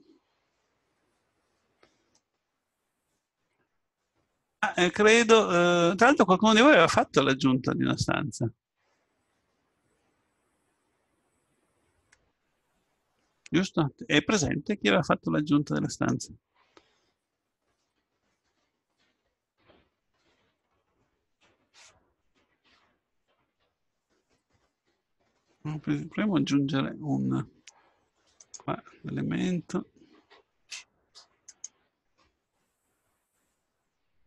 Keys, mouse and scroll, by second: 2.2-3.8 middle drag, 4.8 middle click, 7.5-9.2 middle drag, 15.9-17.8 right drag, 18.0-19.8 drag, 20.8 ctrl+z, 23.2 click, 25.8-28.4 middle drag, 28.4-30.4 drag, 31.5 click, 32.8 click, 33.9 click.